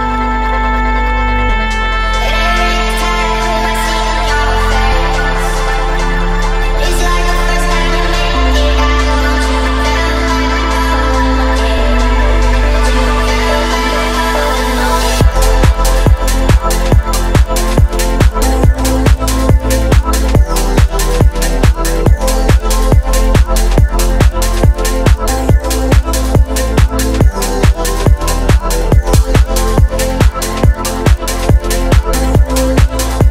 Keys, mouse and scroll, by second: 0.7 click, 1.0 shift+a, 4.1 click, 7.2 s, 11.3 KP_3, 13.9 click, 15.0 Tab, 20.9 click, 20.9 middle click, 20.9 scroll down 1, 21.3 Tab, 21.6-22.0 scroll up 1, 22.1 ctrl+a, 23.4-24.2 right drag, 24.2 click, 25.1 click, 25.7-26.9 drag, 27.4 shift+middle drag, 28.3 click, 29.6-30.1 scroll up 1, 30.2 shift+middle drag, 30.9-32.1 middle drag, 32.4-33.0 scroll down 1.